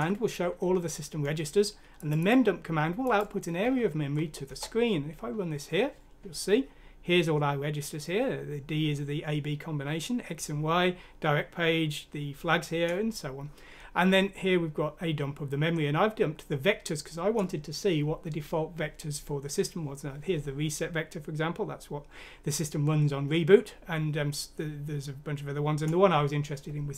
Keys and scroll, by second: 3.6 F6, 4.5 Return.